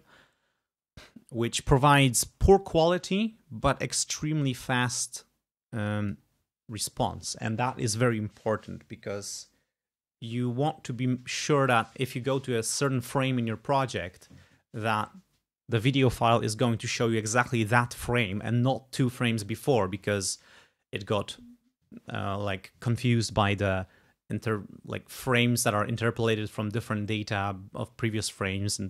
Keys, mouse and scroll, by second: 4.2 click.